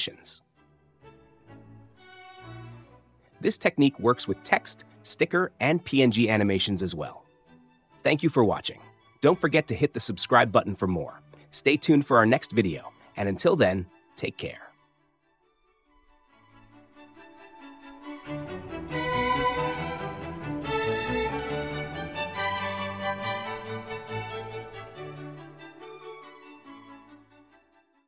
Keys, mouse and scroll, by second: 0.7 ctrl+c, 1.5-1.9 drag, 2.4 ctrl+v, 2.9 click, 3.1 space, 4.9 space, 20.1 click.